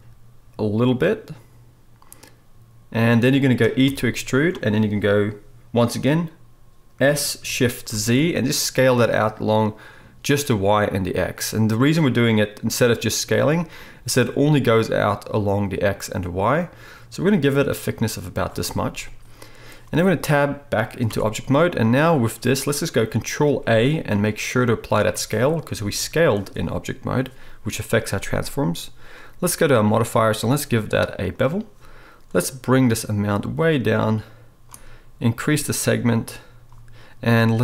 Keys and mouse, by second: 3.8 e, 7.0 s, 21.1 Tab, 23.1-30.5 ctrl+middle drag, 23.5 ctrl+a, 25.7 g, 30.5-37.6 drag.